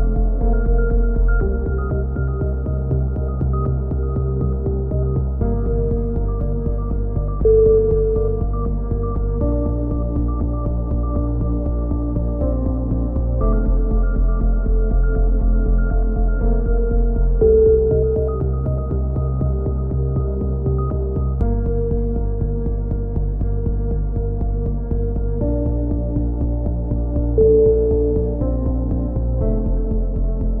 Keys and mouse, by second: 0.4 a, 1.4 ctrl+n, 2.1 click, 2.4 a, 2.7 Tab, 6.5 KP_3, 6.8 z, 7.9 Tab, 8.2-9.2 drag, 24.3-26.4 middle drag, 26.4-27.4 drag, 27.4 middle click.